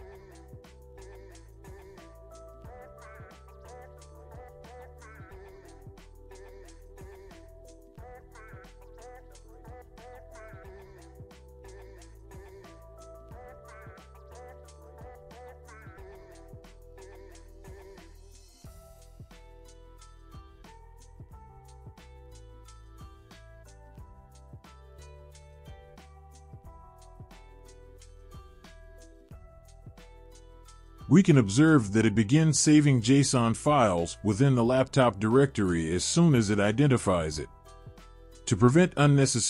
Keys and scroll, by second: 0.0-1.5 typing, 7.1 Return, 9.2-13.9 typing, 14.0 Return, 18.4 Up, 18.7 Up, 19.8 Return, 21.1 typing.